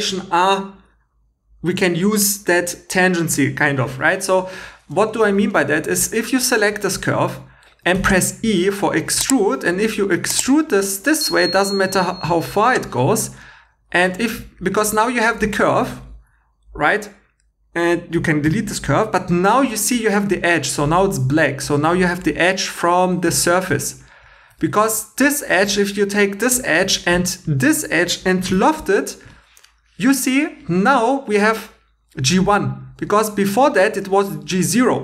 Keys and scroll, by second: 4.6 2, 7.9 e, 13.7 2, 18.5 x, 22.9 3, 23.7 2, 28.5 |.